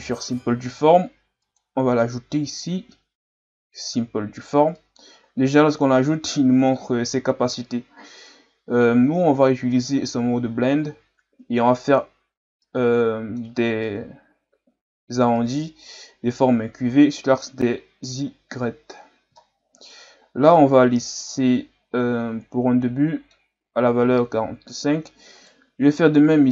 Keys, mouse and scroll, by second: 4.0 click, 4.7-7.7 middle drag, 9.7 click, 11.9 click, 12.6-16.1 middle drag, 16.1 ctrl+scroll up 2, 19.3-23.5 middle drag, 25.4 right click.